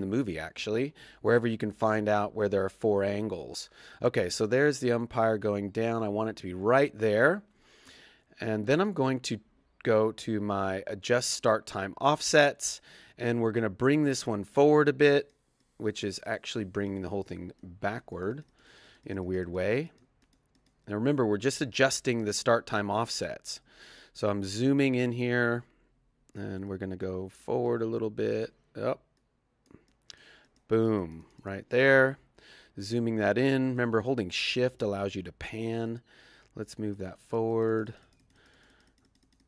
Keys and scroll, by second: 4.8 Right, 6.8 Left.